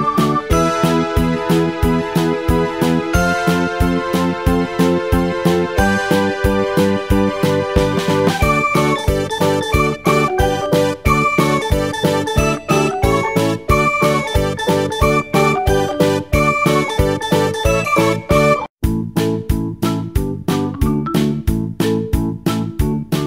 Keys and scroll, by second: 22.6 Return.